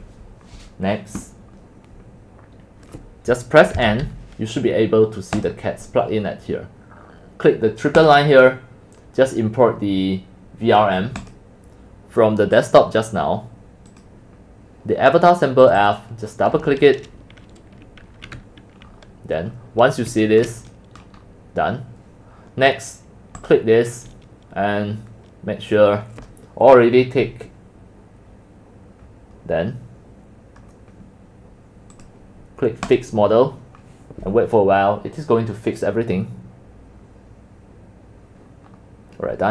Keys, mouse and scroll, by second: 0.1 middle click, 3.8 n, 5.4-5.9 drag, 8.0 click, 9.0 middle click, 11.2 click, 13.7 click, 15.7 click, 15.8 click, 18.8-20.3 middle drag, 18.8-19.2 scroll up 7, 19.2-20.0 scroll, 21.3 middle click, 22.5 scroll up 2, 23.4 click, 24.1 click, 25.0-28.6 drag, 32.0-33.0 drag, 38.7 middle click, 38.8 middle click.